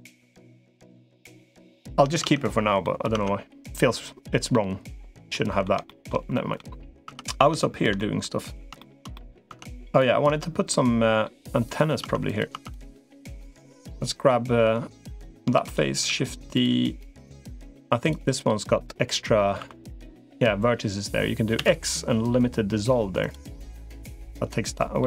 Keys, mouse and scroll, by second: 0.8 middle click, 1.5 middle click, 2.1 Tab, 2.6 middle click, 2.9 Tab, 3.7 middle click, 5.1 middle click, 5.7 shift+middle click, 6.1 middle click, 6.9 Tab, 7.4 shift+middle click, 7.8 middle click, 8.6 middle click, 8.9 middle click, 9.3 Tab, 10.1 Tab, 10.5 middle click, 11.5 click, 11.9 Tab, 12.1 click, 12.3 Tab, 12.5 click, 13.1 3, 13.5 middle click, 15.5 shift+d, 15.9 s, 16.9-17.9 drag, 19.5 1, 21.3 x, 24.8 middle click.